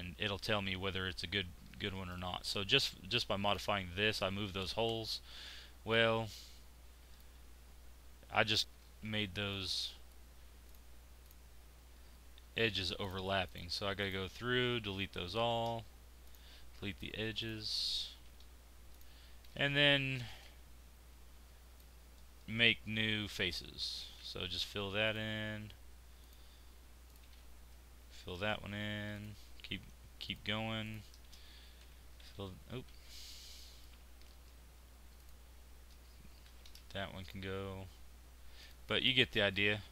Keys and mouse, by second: 2.1-5.0 drag, 5.0 Tab, 9.8 middle click, 15.4 x, 18.3 x, 23.8 f, 28.0 f, 31.8 f, 32.9 ctrl+z, 34.3-35.3 drag, 36.4 x, 39.0 middle click.